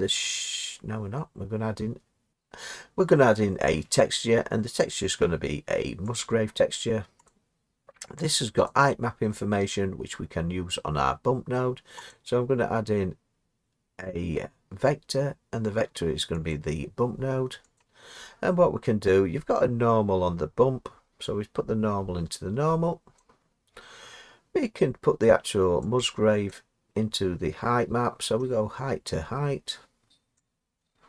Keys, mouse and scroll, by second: 6.3 click, 7.3 click, 16.5 click, 17.8 click, 23.1 click, 26.5 click.